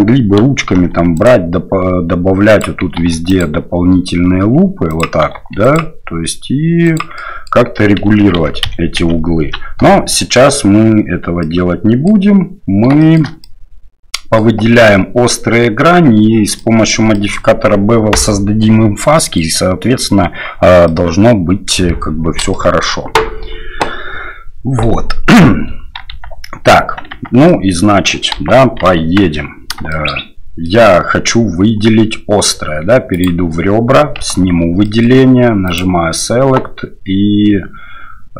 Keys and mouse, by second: 0.7 ctrl+r, 7.2 click, 8.4 ctrl+z, 10.1 click, 11.4 click, 13.0 shift+click, 13.4 click, 16.6 click, 17.1 shift+click, 19.1 click, 20.8 click, 22.5 shift+click, 26.1 Tab, 27.1 Tab, 27.5 click, 28.3 KP_1, 29.0 KP_3, 29.9 shift+click, 30.6 click, 33.1 click, 34.4 alt+a, 34.8 middle click, 35.6-38.3 drag.